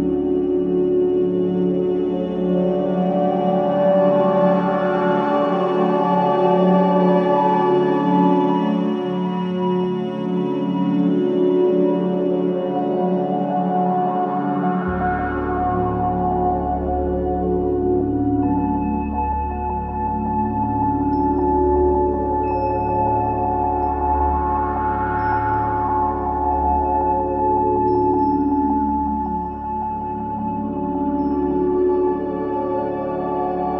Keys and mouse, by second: 1.2 click, 2.8-4.2 typing, 4.3-6.6 ctrl+alt+drag, 7.5 click, 8.5 click, 10.2 click, 13.5 click, 14.4 click, 15.6 click, 15.9 click, 17.2 click, 17.4 click, 18.0-18.5 typing, 20.0 click, 20.4 click, 20.9-22.0 drag, 23.0 click, 23.5 Delete, 24.8 click, 25.5-27.3 drag, 25.5 typing, 27.3 typing, 27.4-29.2 drag, 30.1 click.